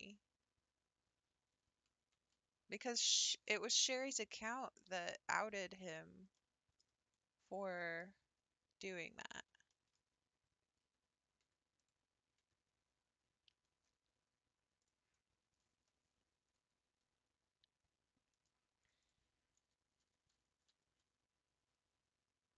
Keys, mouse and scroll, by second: 2.0 Tab, 3.4 ctrl+i, 4.9 x, 5.4 middle click, 5.9-6.3 scroll down 6, 6.3 middle click, 7.2 scroll down 2, 7.4 scroll up 6, 7.7-8.9 middle drag, 8.9 click, 9.3 scroll up 3, 9.7-11.4 shift+middle drag, 11.4 Tab, 11.8 click, 12.4 Tab, 14.9 click, 15.7 l, 16.8 r, 19.1 click, 20.0 l, 20.7 r.